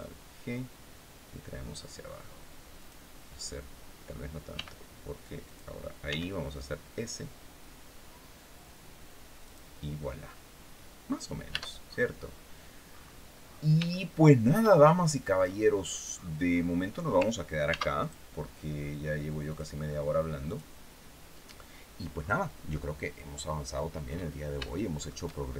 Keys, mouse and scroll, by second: 2.4 click, 4.2 g, 5.1 click, 5.7 s, 9.1 click, 10.4-10.7 scroll down 1, 11.1 Tab, 11.5-12.2 scroll down 2, 12.5-13.0 scroll up 1, 13.1-13.5 scroll down 1, 13.6 shift+middle click, 14.5-14.9 shift+scroll up 1, 15.1-15.8 scroll down 2, 15.8-16.5 scroll up 2, 17.3 ctrl+s, 17.7 ctrl+click, 19.1 click, 20.1 click, 21.8 scroll down 1, 23.1-23.4 scroll down 1, 23.7-24.1 scroll up 1, 24.3 shift+middle click, 25.0 shift+scroll up 2.